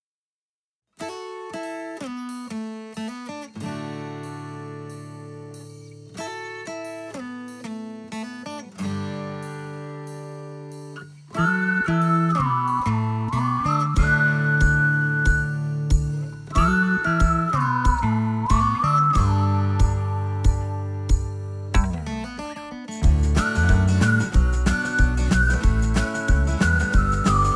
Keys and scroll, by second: 0.9 ctrl+g, 2.6 m, 12.0 space, 14.3 t, 19.1 space, 23.6 x, 24.5 x.